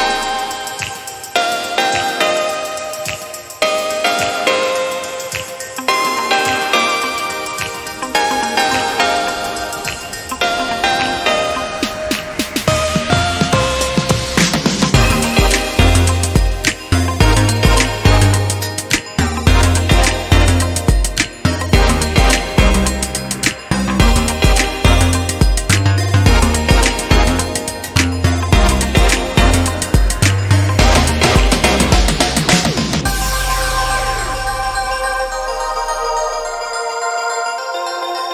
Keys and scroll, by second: 4.5 ctrl+[, 7.0 Right, 7.3 Right, 8.5 ctrl+j, 9.6 ctrl+t, 29.9 ctrl+0.